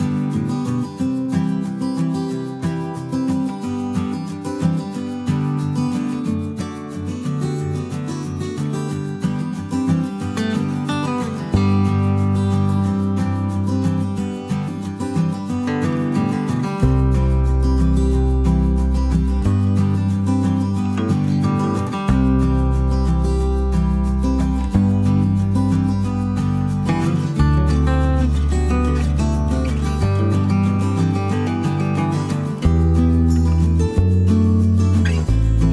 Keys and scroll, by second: 8.8-9.4 typing, 10.5 ctrl+d, 11.8 b, 17.9 ctrl+*, 20.6 Page_Down, 21.6 typing, 23.0 space, 24.4 ctrl+d, 27.8 Page_Down, 29.4 -, 30.5 +, 30.6 +, 31.7 ctrl+d, 33.1 ctrl++, 34.8 F7.